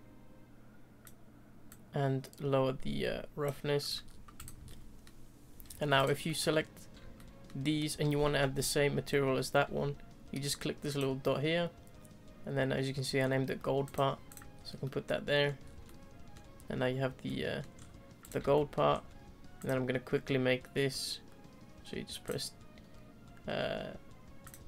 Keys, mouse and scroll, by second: 1.9-3.9 drag, 4.1-4.4 scroll down 1, 4.4 click, 4.6-6.0 middle drag, 6.0 click, 6.2-13.9 middle drag, 14.3 click, 14.5 scroll down 2, 14.8-15.7 middle drag, 15.7 scroll down 2, 15.8-17.7 middle drag, 17.7-18.3 scroll up 4, 18.3 click, 18.5-18.9 shift+middle drag, 18.9-22.3 scroll up 2, 22.3-24.6 drag.